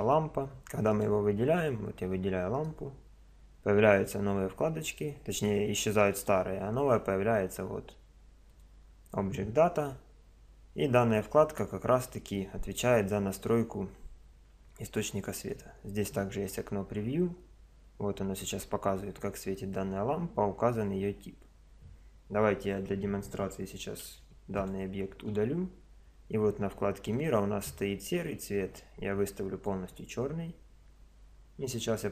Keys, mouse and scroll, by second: 15.4 click, 24.0 x, 27.1 click.